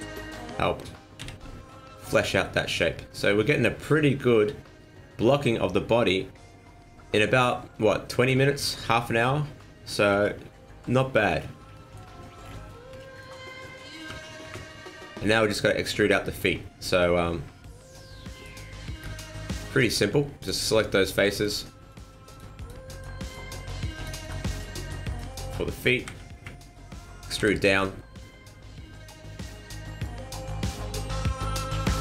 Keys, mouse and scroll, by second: 0.3-0.7 scroll down 1, 1.2 z, 2.3 scroll down 1, 2.4 middle click, 7.3 scroll down 2, 7.5 middle click, 10.1 KP_1, 11.3-11.7 scroll up 4, 11.7 shift+middle click, 12.4-12.9 scroll up 5, 13.0 shift+middle click, 13.3 shift+scroll down 1, 14.1 KP_1, 14.4 KP_3, 16.0 middle click, 16.5 scroll up 2, 18.3 right click, 18.7 Tab, 19.0 middle click, 20.4 click, 21.0 right click, 21.4 shift+right click, 21.9 right click, 22.3 right click, 22.6 shift+right click, 22.9 shift+right click, 23.3 shift+right click, 23.6 right click, 23.9 shift+right click, 24.3 shift+right click, 24.5 shift+right click, 24.8 shift+right click, 25.1 shift+right click, 25.3 shift+right click, 26.1 KP_1, 26.3 KP_3, 27.4 e, 31.5 click.